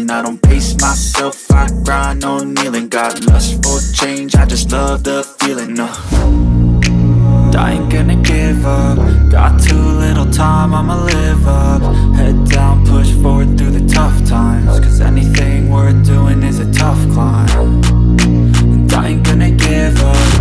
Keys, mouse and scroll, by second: 0.0 click, 0.8 click, 1.7-2.3 drag, 2.6 click, 2.7-4.6 drag, 8.3 click, 12.6-14.9 drag, 14.9 scroll up 1, 15.1-16.8 middle drag, 16.8 KP_1, 18.0 click, 18.6-20.0 drag.